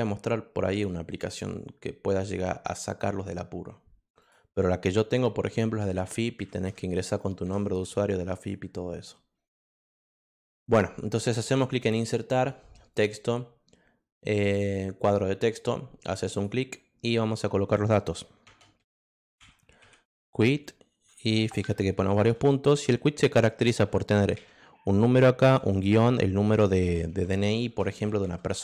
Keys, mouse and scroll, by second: 4.2 click, 8.3 click, 11.5 click, 12.9 click, 15.0 click, 16.3 click, 18.5-22.2 typing, 23.7 2, 24.4 0, 25.5-28.6 typing.